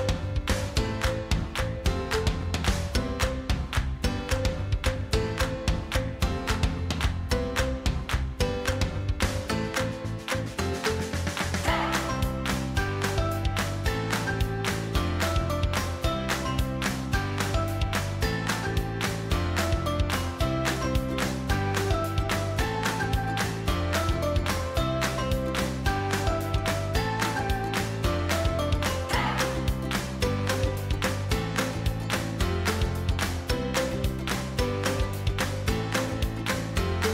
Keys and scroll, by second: 9.6 ctrl+t.